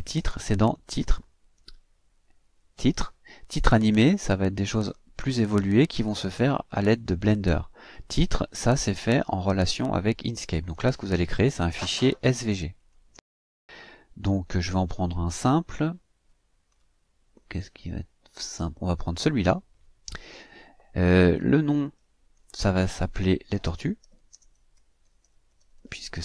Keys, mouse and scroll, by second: 0.8 click, 12.9 click, 16.2 click, 16.9-17.3 scroll up 2, 17.3 scroll down 2, 19.2 click, 21.8 click, 23.3-26.2 typing.